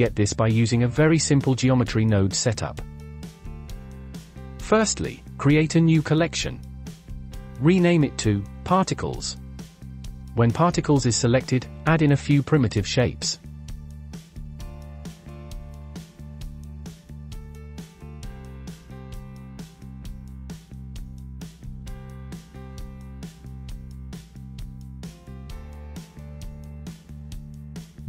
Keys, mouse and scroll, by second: 3.0 scroll down 5, 3.3 shift+middle click, 4.1-5.0 drag, 5.4-6.9 right drag, 6.9 click, 7.1 click, 10.3-11.6 drag, 12.9-15.5 drag, 15.5-16.3 shift+middle drag, 16.3-17.8 drag, 18.3 s, 19.9-21.5 drag, 24.1 s, 25.9 shift+click, 27.2 click, 27.6 KP_1.